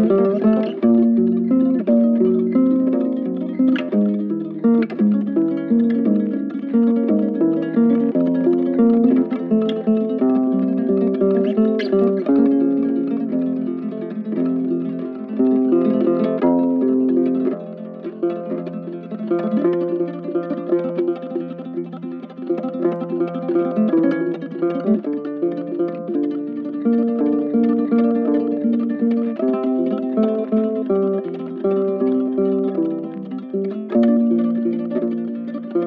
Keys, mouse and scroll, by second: 10.9 right click, 14.5 right click, 16.9 double click, 18.4 double click, 18.9 shift+click, 19.8 double click, 21.1 right click, 25.5 double click, 28.2 double click, 29.6 double click, 32.8 double click.